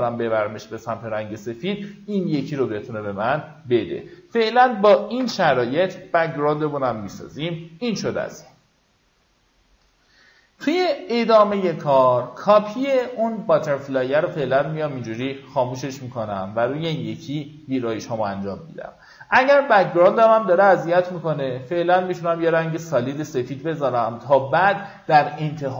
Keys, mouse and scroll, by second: 4.8 v, 6.9-23.7 drag.